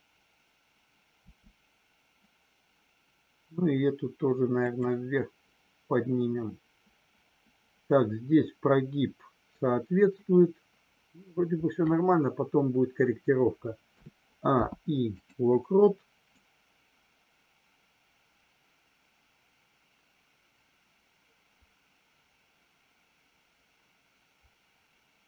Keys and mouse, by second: 4.6 click, 14.5 i, 16.4-25.2 drag.